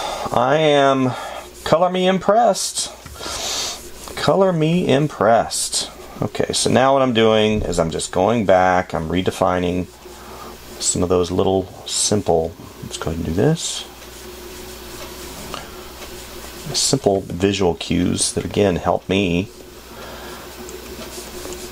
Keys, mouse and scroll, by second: 6.9 space, 8.9 space, 17.5 space.